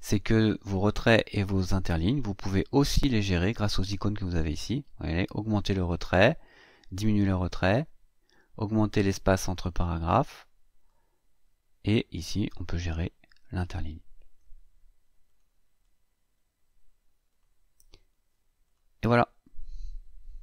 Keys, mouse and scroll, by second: 9.3 click, 11.9 click, 15.0 click, 17.1 click, 18.4 click.